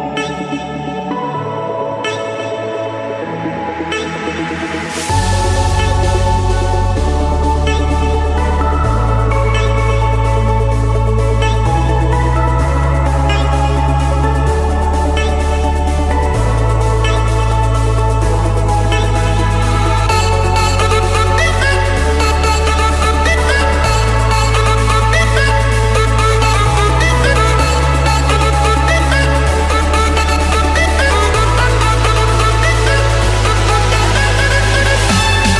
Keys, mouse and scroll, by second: 0.6 Escape, 5.9-6.5 typing, 7.1 Return, 8.2 click, 8.6 Return, 15.1-16.2 drag, 16.9 shift+click, 18.0 Return, 20.3-21.4 drag, 22.6 click, 22.8-23.4 scroll down 7, 23.4 scroll, 23.7 scroll, 25.6 click, 26.6 click, 26.9-27.3 scroll, 28.1 click, 29.0 click, 29.5 click, 29.6 scroll, 29.7-30.4 scroll, 30.6 click, 31.0-31.6 scroll, 31.6-32.1 scroll, 33.1 click, 35.4 click.